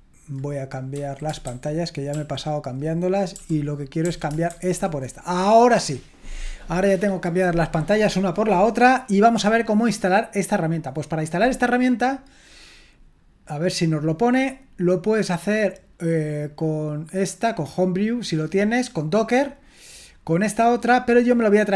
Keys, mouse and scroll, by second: 1.0 super+h, 1.5 shift+super+h, 4.6 super+l, 10.3-21.7 drag.